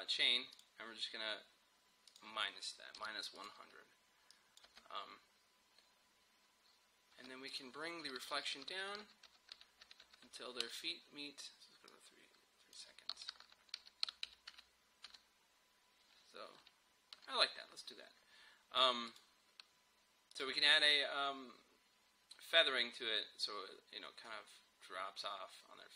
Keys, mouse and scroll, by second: 0.6 click, 3.4 click, 4.7 space, 7.2 space, 7.5 click, 8.5 shift+Down, 11.9-13.4 drag, 13.4 shift+Down, 13.8 shift+Up, 16.7 Down, 19.1 click.